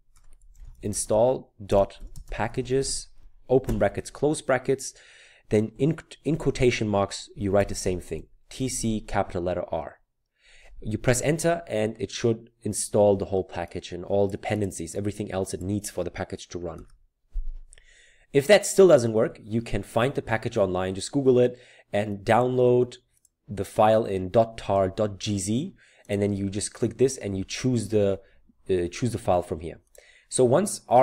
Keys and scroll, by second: 0.0-3.7 typing, 6.3 typing, 7.6-8.6 typing.